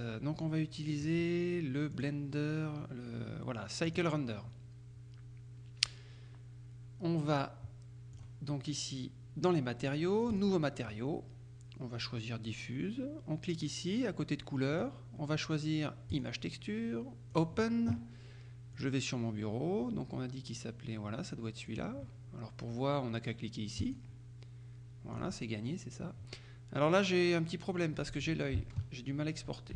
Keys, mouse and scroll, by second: 2.0 click, 3.9 click, 8.2 click, 10.4 click, 14.8 click, 16.2 click, 17.4 click, 18.8 click, 21.7 click, 23.9 click, 25.2 click, 28.9 alt+Tab.